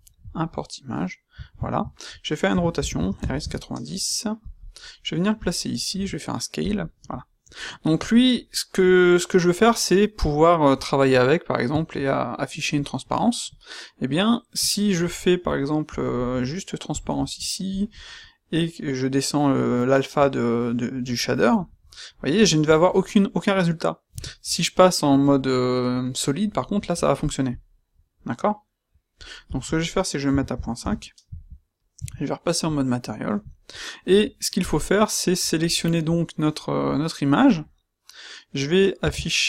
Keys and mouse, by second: 2.4 r, 5.9 s, 24.0 z, 31.9 z, 36.1-38.9 middle drag, 38.9 space.